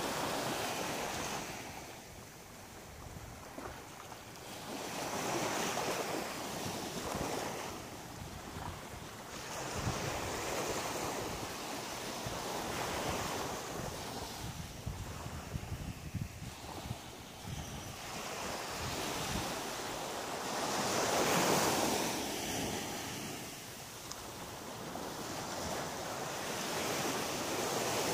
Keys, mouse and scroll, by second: 5.3-5.7 scroll up 4, 6.7 ctrl+z, 6.9 ctrl+z, 7.1 ctrl+z, 7.3 ctrl+z, 7.6 ctrl+z, 7.7 ctrl+z, 7.8 ctrl+z, 8.0 ctrl+z, 8.1 ctrl+z, 8.3 ctrl+z, 8.5 ctrl+z, 8.6 ctrl+z, 8.8 ctrl+z, 9.0 ctrl+z, 9.2 ctrl+z, 9.4 ctrl+z, 9.6 ctrl+z, 9.7 ctrl+z, 9.9 ctrl+z, 10.1 ctrl+z, 10.3 ctrl+z, 10.5 ctrl+z, 10.6 ctrl+z, 10.8 ctrl+z, 11.0 ctrl+z, 11.2 ctrl+z, 11.5 ctrl+z, 11.6 ctrl+z, 11.8 ctrl+z, 12.0 ctrl+z, 12.2 ctrl+z, 12.3 ctrl+z, 12.4 ctrl+z, 12.6 ctrl+z, 12.8 ctrl+z, 13.0 ctrl+z, 13.7 middle click, 14.9 shift+middle click, 15.8 middle click, 16.6 right click, 17.0 shift+right click, 17.7 right click, 18.5 shift+right click, 19.3 shift+right click, 19.8 shift+right click, 21.4 shift+right click, 22.0 shift+right click, 22.5 shift+right click, 23.2 shift+middle click, 24.1 shift+right click, 24.6 shift+right click, 25.1 middle click, 26.5 g, 28.0 click.